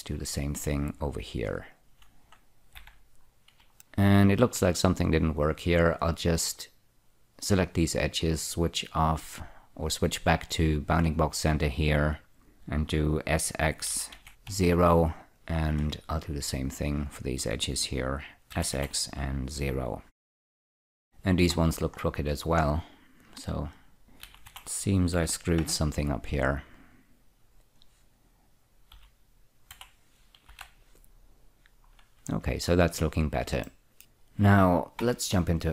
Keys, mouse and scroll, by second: 0.4 click, 2.0 shift+click, 3.1 f, 3.2-3.7 scroll up 2, 3.7 middle click, 5.7 click, 9.2 click, 11.3 click, 14.2-14.8 typing, 15.3 click, 15.6 click, 16.7 click, 18.8-19.9 typing, 20.0 click, 20.1-20.7 scroll down 3, 20.7-21.7 scroll up 3, 21.9-22.8 scroll down 3, 22.8 scroll up 2, 23.7 click, 24.6-25.4 typing, 25.9 Return, 27.1 click, 29.2-30.8 typing, 31.3 click, 31.9-32.4 scroll up 1, 33.9 shift+middle click, 35.3 Tab.